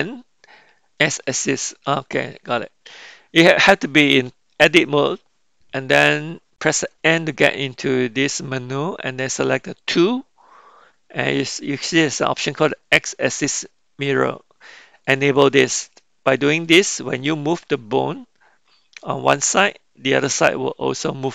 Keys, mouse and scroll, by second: 9.9 click, 15.1 click.